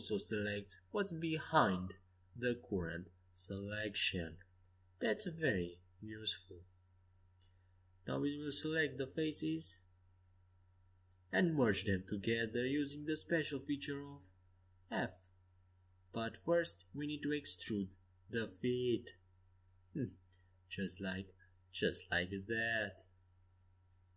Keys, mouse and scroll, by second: 3.3 KP_5, 4.3 a, 5.5 z, 8.2 c, 11.0-13.2 drag, 11.8 c, 13.8-15.3 middle drag, 14.2 e, 15.7 s, 17.7-19.6 drag, 19.9-22.0 middle drag, 22.0-23.9 drag.